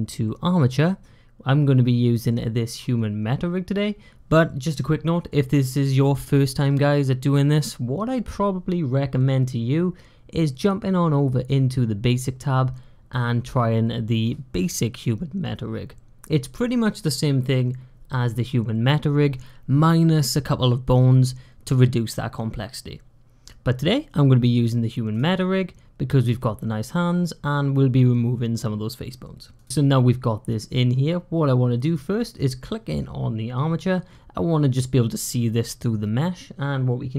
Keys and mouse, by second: 29.4 click.